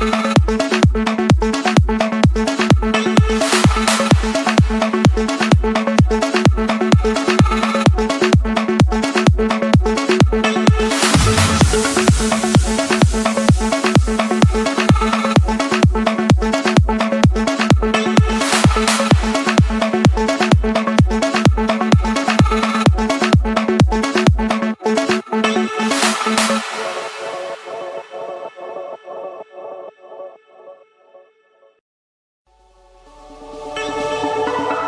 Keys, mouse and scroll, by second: 0.3 Return, 1.8-2.9 drag, 4.1-5.3 drag, 6.2-7.3 drag, 7.3 Escape, 8.3 click, 10.3 Delete, 11.7 click, 12.5 click, 13.8 click, 14.5 click, 16.0 j, 17.2 Return, 26.3-27.7 typing, 28.0 Return, 29.8 click, 30.7 Return, 32.4 click, 34.1 Return.